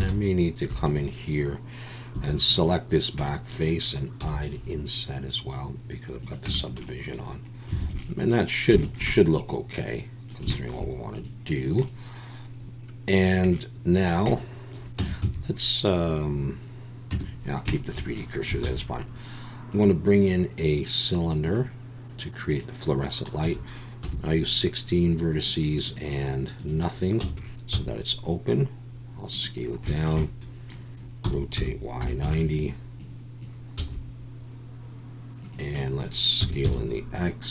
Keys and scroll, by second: 0.0 alt+a, 0.7 4, 2.2 3, 4.2 i, 6.5 Tab, 7.8 alt+a, 15.0 Tab, 15.2 a, 17.1 Tab, 18.6 shift+a, 27.2 Tab, 27.7 s, 31.2 r, 31.5 y, 32.0 9, 32.2 0, 33.8 s, 36.4 s, 36.6 x.